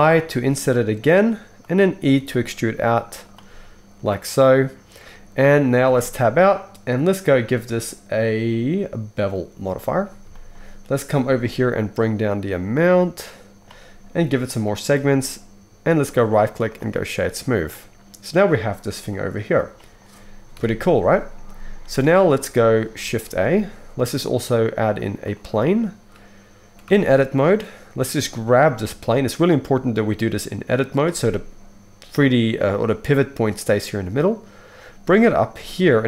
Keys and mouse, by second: 0.1 i, 2.1 e, 5.9 Tab, 7.2-16.0 drag, 16.0-23.0 middle drag, 20.5 KP_1, 22.6 shift+click, 22.6 shift+right click, 22.8 drag, 22.8 right drag, 23.2 shift+a, 26.8 Tab, 28.7 g, 31.0-36.0 right drag, 35.5 g.